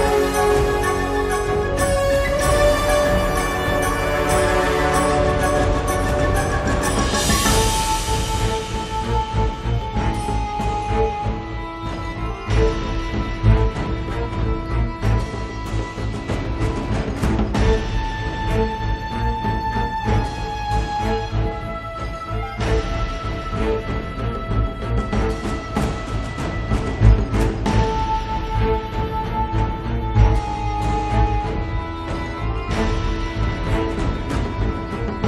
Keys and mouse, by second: 3.1-5.0 drag, 5.0 middle click, 5.1-9.7 drag, 9.8 click, 10.5 click, 11.7 f, 11.9 middle click, 12.0 click, 12.7 middle click, 12.9 click, 13.3 right click, 13.6 middle click, 13.7-15.0 drag, 13.7 right click, 14.8 right click, 15.0 middle click, 15.4 click, 15.4 right click, 15.9 middle click, 16.3 click, 16.3 right click, 16.8 right click, 17.1 middle click, 17.3 click, 17.3 right click, 18.0 middle click, 18.7 click, 19.5-21.5 typing, 19.7 click, 20.1 click, 21.5 click, 22.1-23.3 drag, 23.1 g, 23.3 f, 23.7 click, 24.9 middle click, 25.2 1, 25.3 f, 25.5-28.3 drag, 28.3 middle click, 29.2 click, 29.2 right click, 29.8-33.0 middle drag, 33.5 click, 33.8-35.2 middle drag.